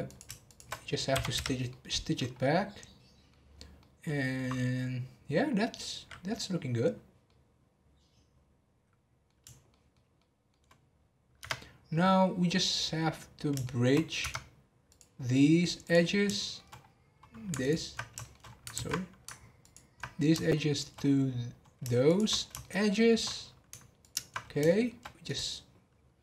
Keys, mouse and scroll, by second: 0.0 click, 0.4 shift+click, 1.1 m, 1.7 middle click, 2.3 scroll down 2, 2.7 middle click, 3.5 scroll down 1, 3.8-6.0 middle drag, 6.0-7.2 scroll down 2, 7.2-11.3 middle drag, 11.3 Tab, 12.1 scroll down 1, 12.4 scroll up 5, 12.8-14.2 middle drag, 14.2 Tab, 14.8-15.9 drag, 16.1 scroll down 2, 16.3 shift+middle click, 16.7 scroll up 2, 17.6 ctrl+click, 18.2 shift+middle click, 18.4 scroll down 1, 18.4 scroll up 2, 18.7 ctrl+z, 19.6 ctrl+click, 20.1-20.5 scroll down 1, 20.5 shift+middle click, 20.9 scroll up 3, 22.0 shift+click, 22.4 scroll down 4, 22.6 shift+middle click, 23.3 scroll up 3, 24.0 ctrl+click, 24.4 scroll down 4, 24.6 shift+middle click, 25.2-26.2 right drag.